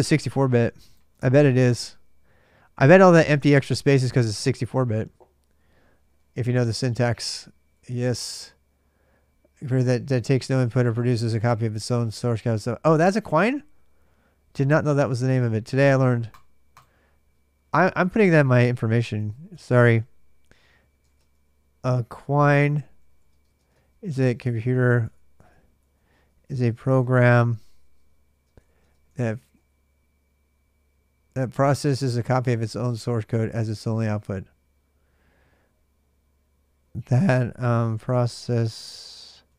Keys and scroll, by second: 18.3-19.8 typing, 20.8-29.9 typing, 36.8-39.5 typing.